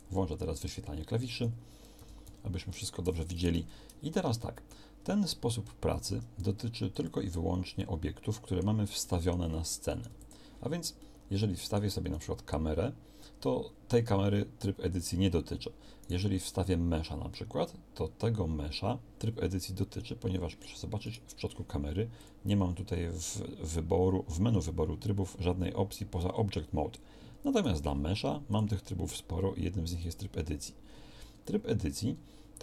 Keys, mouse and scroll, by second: 0.7 b, 1.9 b, 3.5 n, 5.9 shift+a, 10.1 x.